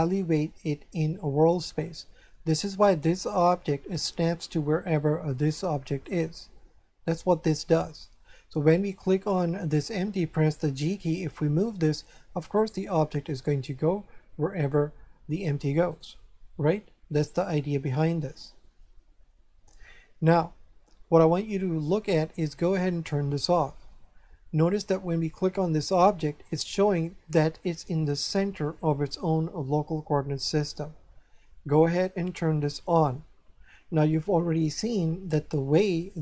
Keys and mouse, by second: 5.3 right click, 8.9 right click, 10.7 g, 15.9 right click, 17.1 right click, 22.9 click, 25.4 right click, 32.8 click.